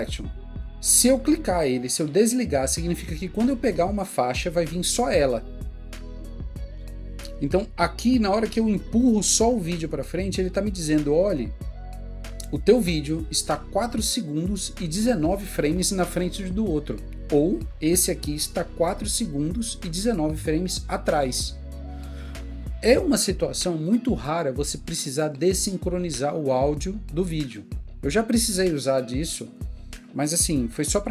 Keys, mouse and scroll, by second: 18.1 click.